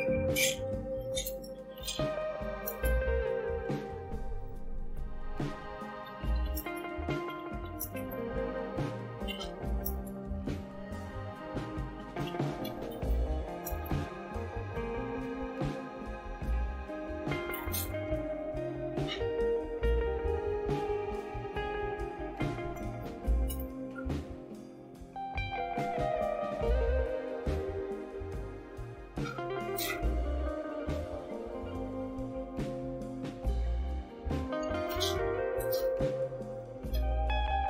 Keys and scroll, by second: 1.0-3.8 typing, 4.9-13.6 typing, 14.7-15.9 typing, 17.5 Return, 23.5 Return.